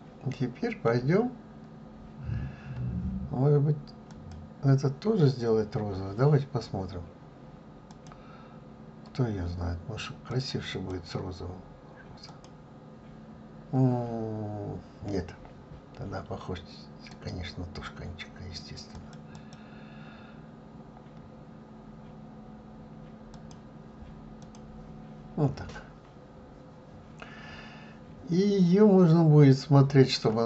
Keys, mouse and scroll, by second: 1.4-1.7 scroll down 2, 2.1-3.4 scroll up 2, 4.2 click, 10.4 click, 12.5-19.0 drag, 21.4-23.6 drag, 24.6 click, 25.9-28.9 middle drag.